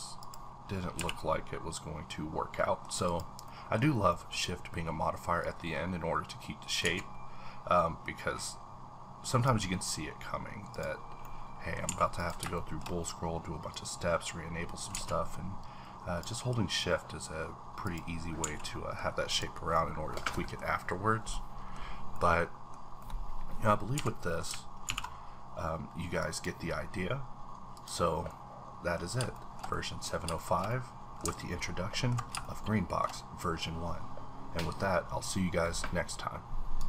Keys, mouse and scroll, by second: 0.2 click, 0.6-0.9 scroll down 1, 0.9 h, 1.2-3.4 middle drag, 3.0 click, 3.8 scroll up 1, 4.1 middle click, 5.4-10.7 drag, 6.8 z, 11.2 middle click, 11.9 a, 12.2 click, 12.6 shift+middle click, 13.7-17.8 drag, 14.9 z, 18.2 scroll down 1, 18.4 a, 18.6 middle click, 19.3 click, 19.7 middle click, 20.7-21.3 scroll down 2, 21.3 middle click, 21.8-22.2 scroll down 2, 22.2-24.2 middle drag, 23.9 a, 24.8 alt+v, 26.2 click, 27.7 click, 28.6-29.0 middle drag, 29.0 scroll up 2, 29.7 shift+middle click, 30.1 scroll down 2, 30.4 shift+middle click, 31.4-32.4 ctrl+middle drag, 32.4-35.4 shift+middle drag.